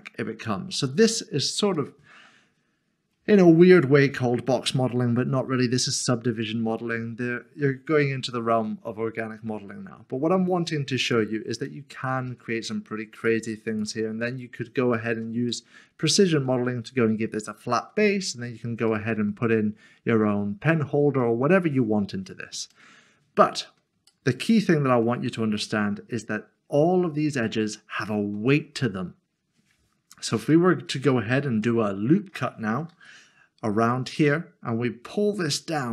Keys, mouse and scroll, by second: 0.2 scroll down 1, 0.7 middle click, 2.3-3.6 scroll down 1, 3.6 click, 6.9 middle click, 9.7 typing, 11.0 click, 11.6 click, 11.8 middle click, 12.3 e, 13.2 click, 14.2 e, 15.5 click, 15.7 middle click, 17.8 middle click, 18.2 scroll down 1, 19.1 shift+middle click, 21.2 shift+middle click, 21.4 middle click, 24.1 shift+middle click, 25.6 middle click, 26.3 scroll up 1, 30.5 middle click, 31.6 shift+middle click, 34.1 click.